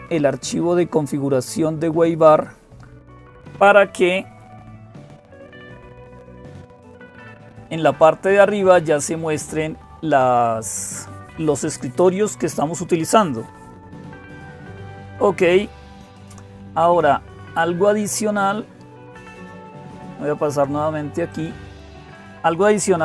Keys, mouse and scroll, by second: 0.0-23.0 typing, 5.8 click.